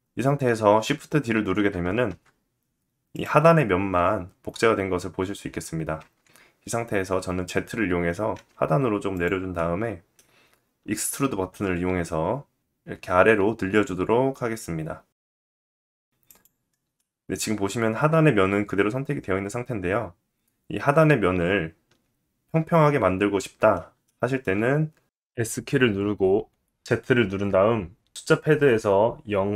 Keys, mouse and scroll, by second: 1.6 shift+d, 2.8-29.5 middle drag, 5.5 ctrl+z, 6.4 g, 12.3 e, 25.0 s.